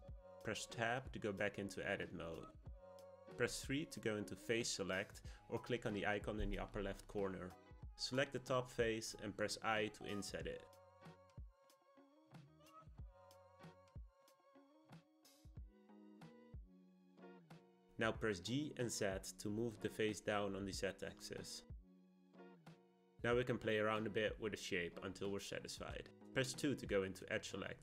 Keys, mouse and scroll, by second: 0.5 Tab, 5.7-7.5 drag, 7.5-8.9 shift+middle drag, 8.9 click, 9.3 click, 9.8-11.8 scroll up 1, 15.6-17.2 middle drag, 17.2 g, 25.2-26.9 drag, 26.9-27.8 middle drag.